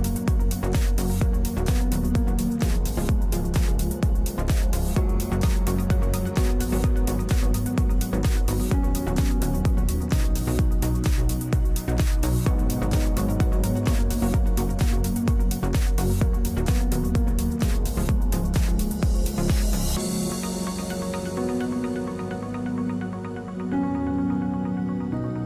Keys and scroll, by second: 2.8 ctrl+space, 22.5 0, 23.0 Return.